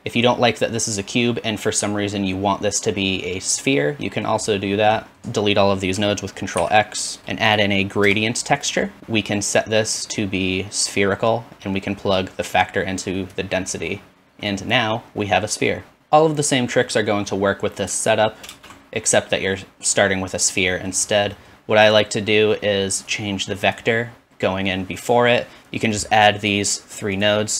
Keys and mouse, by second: 5.2 ctrl+z, 6.6 ctrl+x, 7.2 shift+a, 7.2 BackSpace, 7.7 middle click, 8.5-14.7 drag, 14.8-20.8 drag, 16.6 middle click, 16.6 right click, 17.5-19.9 typing, 17.8 middle click, 17.8 right click, 18.8 middle click, 18.8 right click, 19.2 middle click, 19.2 right click, 19.8 alt+middle click, 19.8 alt+right click, 20.9-24.1 drag, 22.9-25.3 middle drag, 22.9-24.1 right drag, 25.3 shift+click.